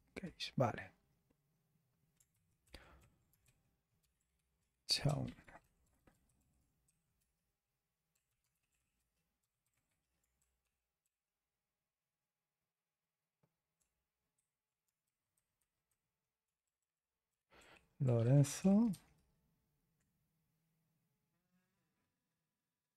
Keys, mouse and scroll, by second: 0.0-0.2 typing, 2.3-11.1 typing, 2.6 ctrl+Return, 14.1-17.0 typing, 17.6 alt+b, 18.0 BackSpace, 18.2 BackSpace, 18.6 BackSpace.